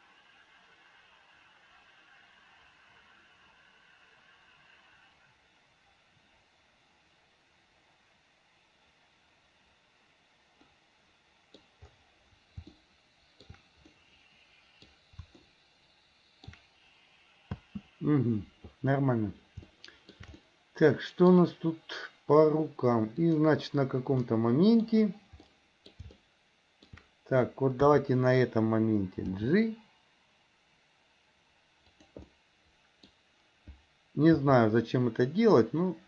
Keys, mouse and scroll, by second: 10.8-11.8 middle drag, 12.9-13.7 shift+middle drag, 14.2-15.0 middle drag, 15.5-16.7 shift+middle drag, 17.6 space, 19.8-20.4 shift+middle drag, 20.6-21.5 middle drag, 23.2 click, 24.4-25.1 middle drag, 25.7-26.1 middle drag, 26.3-27.1 shift+middle drag, 27.9 KP_3, 29.5 g, 32.4 middle click, 34.5 r.